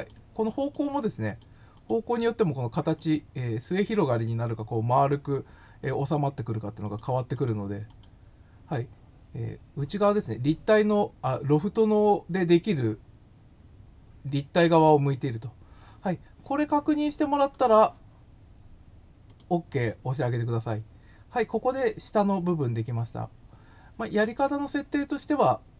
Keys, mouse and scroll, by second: 0.6 click, 1.3 click, 1.7 click, 2.9 click, 6.8 click, 7.3 click, 7.8 click, 16.8 scroll, 17.1 scroll, 19.2 click.